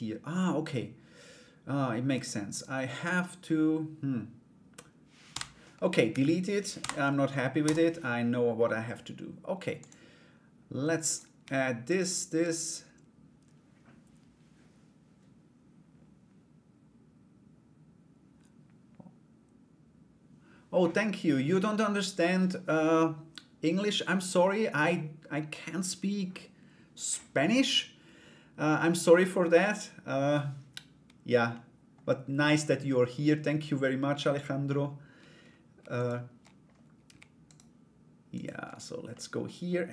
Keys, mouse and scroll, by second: 2.1 right click, 4.9 Delete, 5.6 Escape, 6.3 Delete, 9.4 click, 10.6 right click, 11.4 shift+right click, 31.1 middle click, 35.5 shift+right click, 37.0 shift+right click, 37.9 shift+right click, 38.7 middle click.